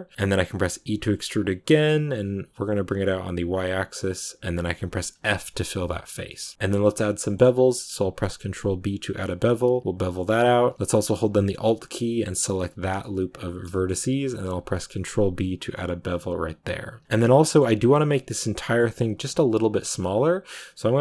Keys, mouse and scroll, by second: 6.1-8.0 shift+middle drag, 8.0 ctrl+b, 12.3 alt+right click, 12.9 middle click, 13.8-14.6 scroll up 1, 14.6 ctrl+b, 17.2-18.7 middle drag, 18.7-19.7 scroll down 1, 19.7-21.0 middle drag.